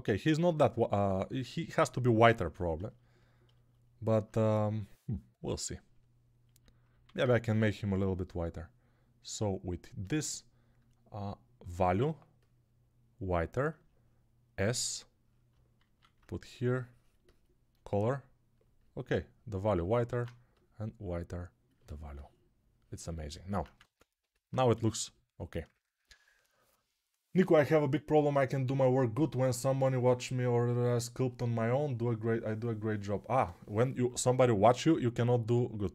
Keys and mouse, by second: 7.0 alt+q, 14.5 s, 15.8 alt+q, 20.0 alt+q, 23.7 ctrl+Tab, 24.8 ctrl+s.